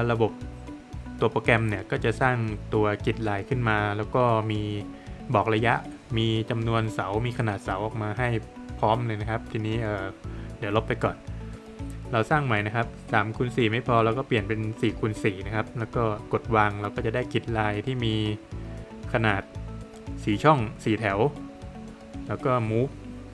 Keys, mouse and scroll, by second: 4.1 scroll up 1, 4.7 middle click, 7.3 click, 8.5 Delete, 9.1 scroll down 1, 9.3 middle click, 9.6 Escape, 11.1 click, 12.4 click, 15.1 click, 18.6 middle click, 18.9 space, 21.4 space, 22.0 click.